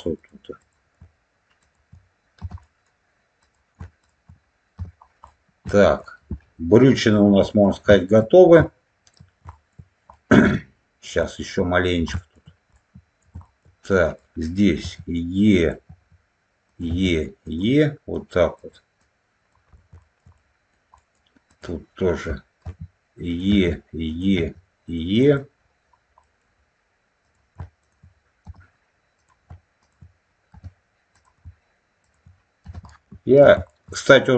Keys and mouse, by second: 2.5 middle click, 5.1 middle click, 7.0 middle click, 7.8 shift+middle click, 8.5 shift+middle click, 9.4 shift+middle click, 10.1 middle click, 11.1 middle click, 12.0 shift+middle click, 12.6 alt+middle click, 13.4 shift+middle click, 13.9 click, 14.7 e, 15.4 click, 15.8 e, 16.6 click, 17.4 click, 17.4 e, 18.0 click, 18.9 click, 19.9 shift+middle click, 20.3 middle click, 20.9 middle click, 21.4 click, 22.5 e, 23.2 click, 23.4 e, 24.0 click, 25.1 click, 26.1 middle click, 27.1 click, 27.7 shift+click, 28.4 f, 29.1 click, 29.7 shift+click, 30.4 f, 31.0 click, 31.9 shift+click, 32.8 alt+middle click, 33.6 shift+middle click.